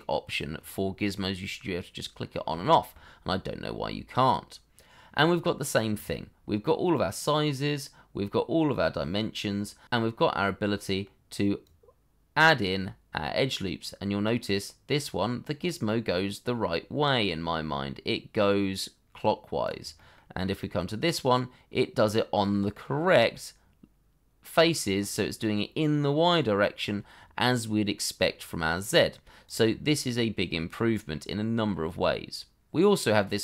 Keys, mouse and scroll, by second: 2.1-2.5 scroll up 1, 2.6 shift+middle click, 4.1-5.5 scroll down 1, 8.1-9.8 scroll down 1, 10.4 middle click.